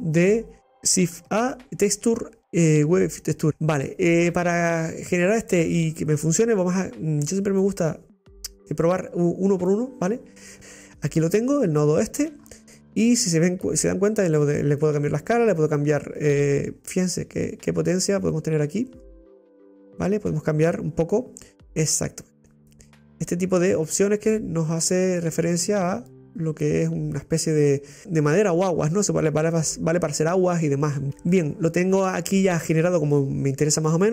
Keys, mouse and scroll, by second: 3.3 Delete, 7.3 click, 8.8 click, 14.2-18.3 drag, 20.4-23.3 drag, 27.2-27.6 scroll down 3, 33.6-34.1 scroll up 6.